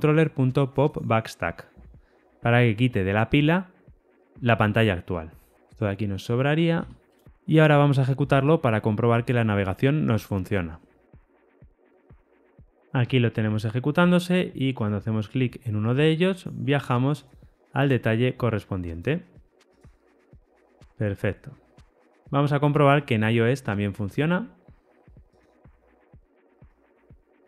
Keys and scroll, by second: 5.5 ctrl+alt+o, 5.7 ctrl+shift+Right, 25.3 ctrl+r.